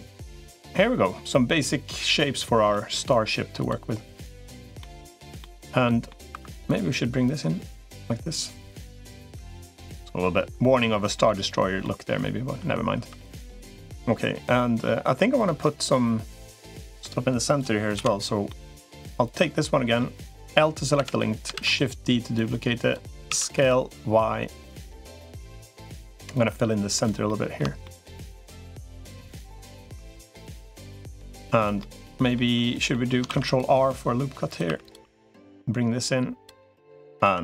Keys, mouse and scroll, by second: 1.2-2.2 drag, 2.5 middle click, 3.4 click, 4.2 click, 4.6 middle click, 5.2 shift+middle click, 5.6 middle click, 6.2 2, 7.2-9.4 drag, 9.4-10.9 middle drag, 11.0 middle click, 11.6 middle click, 12.8 3, 13.0 click, 13.3 middle click, 14.2 middle click, 15.4-16.8 middle drag, 17.8 l, 18.3 middle click, 19.0 click, 19.4 middle click, 21.4 shift+d, 22.2 click, 23.2 s, 25.1 middle click, 26.2 click, 27.0 middle click, 27.6 shift+middle click, 28.4-29.4 drag, 29.5 middle click, 31.0 click, 31.6 middle click, 32.3 middle click, 33.0 ctrl+r, 34.6 click, 34.6 3, 35.2-36.4 drag, 36.5 middle click, 37.2 2.